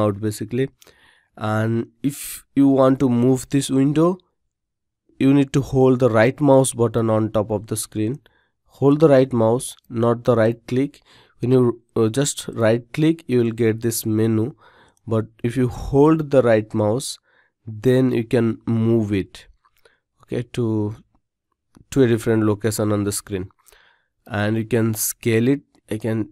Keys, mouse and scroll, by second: 6.5-11.5 right drag.